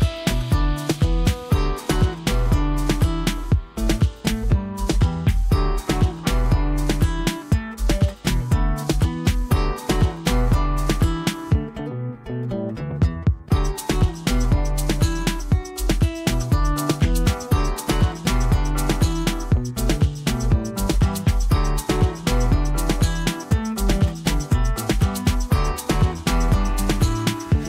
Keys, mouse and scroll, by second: 0.9-2.4 scroll down 1, 2.4-3.7 drag, 6.7 space, 6.8 right click, 7.0 click, 7.7 space, 8.1 ctrl+click, 10.4-11.3 click, 12.3-12.9 click, 14.1-15.3 drag, 22.3 ctrl+alt+z, 23.4-25.0 drag.